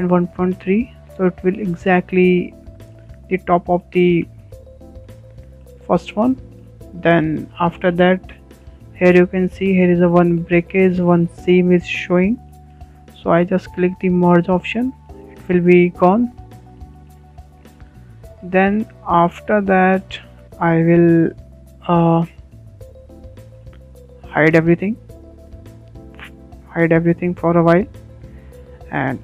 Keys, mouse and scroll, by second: 1.7-5.2 shift+middle drag, 5.2 scroll up 1, 5.4-6.2 shift+middle drag, 6.2 scroll up 3, 6.6-8.0 shift+middle drag, 8.0 scroll down 2, 8.3-15.6 shift+middle drag, 15.6 click, 16.3-17.8 shift+middle drag, 17.8-18.1 scroll down 4, 18.1-18.5 shift+middle drag, 18.5-18.8 scroll down 3, 18.8-20.6 shift+middle drag, 20.6 scroll down 2, 20.9-21.7 shift+middle drag, 21.7-24.0 scroll up 1, 24.0 click, 24.4 scroll down 2, 24.6-25.1 shift+middle drag, 25.1 click, 26.5 g, 26.7 g, 28.5 h, 28.7 h.